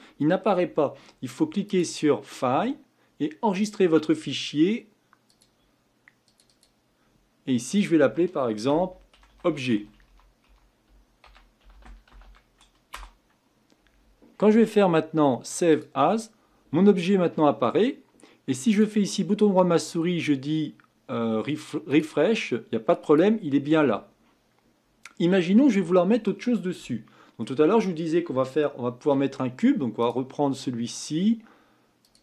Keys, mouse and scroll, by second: 1.6-4.8 drag, 18.7-21.8 right drag, 23.0 click, 25.1-25.5 scroll down 1, 25.5-30.0 middle drag, 30.0-32.1 drag.